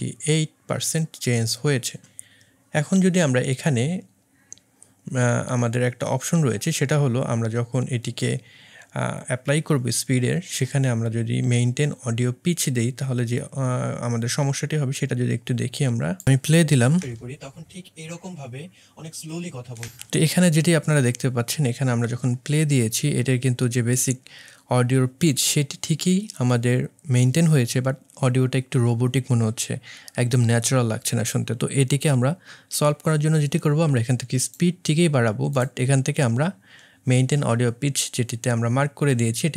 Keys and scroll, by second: 17.0 space, 19.8 space.